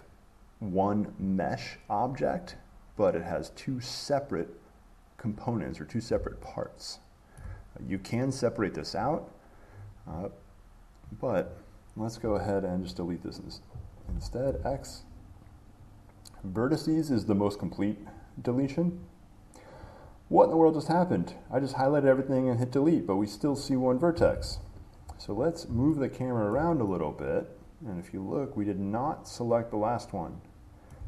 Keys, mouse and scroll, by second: 6.3 click, 7.6 shift+middle click, 11.3 click, 13.3 click, 14.2 x, 19.2-21.3 drag, 24.3 click, 24.5 ctrl+z, 26.7 shift+middle click.